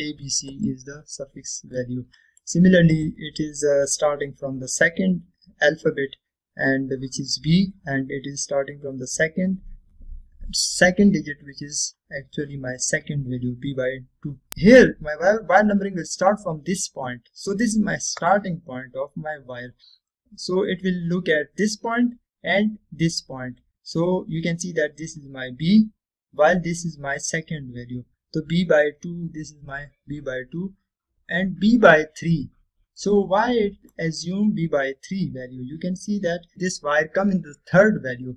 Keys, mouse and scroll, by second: 2.0 scroll down 1, 2.9-3.7 middle drag, 4.3-5.4 scroll down 1, 14.3 scroll up 1, 20.6-21.4 scroll down 1, 28.5 scroll up 1, 33.0-34.1 scroll down 1, 34.1-35.3 middle click, 35.3-35.8 scroll down 1.